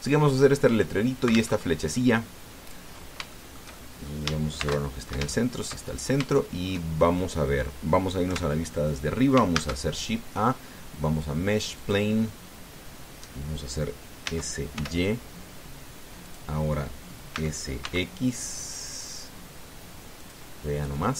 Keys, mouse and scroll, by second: 2.3 alt+Tab, 3.7 scroll up 3, 4.1 shift+middle click, 5.4 shift+c, 6.1 shift+middle click, 6.6 shift+scroll up 2, 7.2 shift+click, 9.1 KP_7, 10.3 shift+a, 12.6 click, 15.0 s, 15.5 y, 17.0 click, 18.1 s, 18.6 x, 21.0 click.